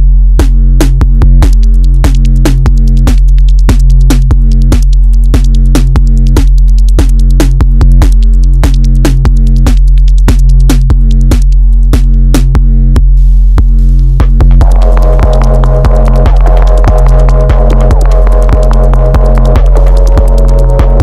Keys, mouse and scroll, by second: 0.1 shift+scroll down 1, 0.1 shift+middle click, 0.9-1.3 scroll up 2, 1.5 Tab, 4.0 shift+middle click, 4.9 alt+click, 5.7 click, 8.7 click, 11.5 click, 12.2 click, 13.4 click, 15.5 click, 16.1 click, 18.2 click, 19.5 click, 20.5-21.0 drag.